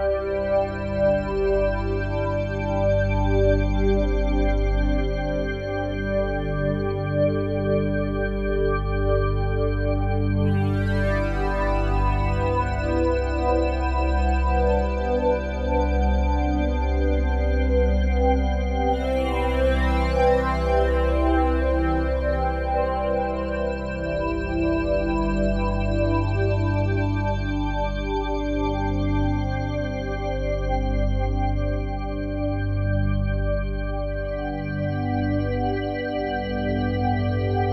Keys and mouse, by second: 0.3 ctrl+s, 2.7 click, 3.1 click, 4.5 alt+a, 5.7 click, 7.3 click, 8.5 alt+click, 9.7 click, 11.2 click, 14.9 click, 15.2 click, 15.9 click, 18.2 click, 19.6 ctrl+s, 19.9 alt+a, 21.0 click, 22.1 alt+click, 23.1 click, 25.1 click, 27.1 click, 30.8 click, 32.9 click, 33.1 click, 34.5 click, 36.6 click.